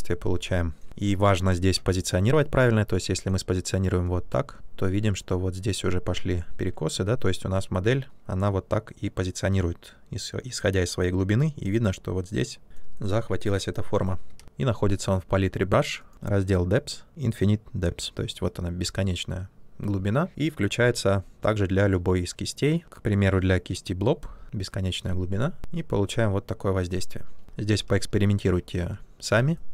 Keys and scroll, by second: 0.9 ctrl+z, 14.3 ctrl+z, 27.8 ctrl+z.